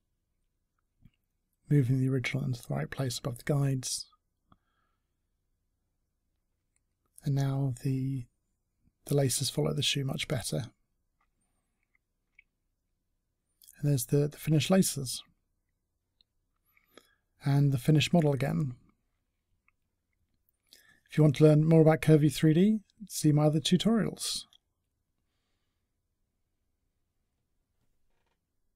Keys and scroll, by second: 0.5 w, 12.0 space.